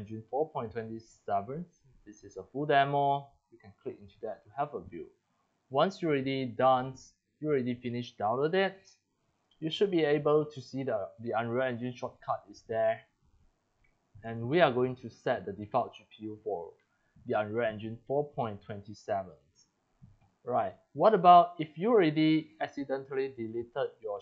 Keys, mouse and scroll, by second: 0.0-2.1 drag, 2.5 click, 3.0-4.2 drag, 5.7 click, 6.6 click, 7.3 click, 9.3 click, 9.6 click, 10.2 click, 14.2 click, 18.9 click, 20.6 click, 21.1 click, 21.5 click, 22.4 click, 23.1 click.